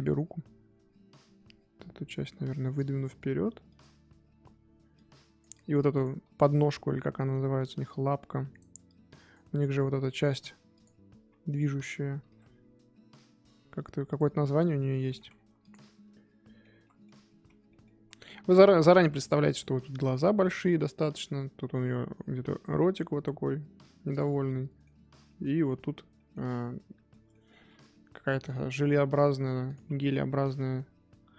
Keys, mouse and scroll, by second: 4.9 click, 5.5 click, 8.8 click, 9.9 middle click, 10.7 click, 11.1 KP_3, 12.2 g, 14.4 middle click, 15.3-15.8 scroll down 2, 15.6 click, 15.8-16.7 middle drag, 16.7 z, 16.8-17.3 middle drag, 17.3 z, 17.7 middle click, 17.9 z, 18.2-19.0 scroll up 1, 19.0-28.6 middle drag, 28.6 KP_3, 29.6 click.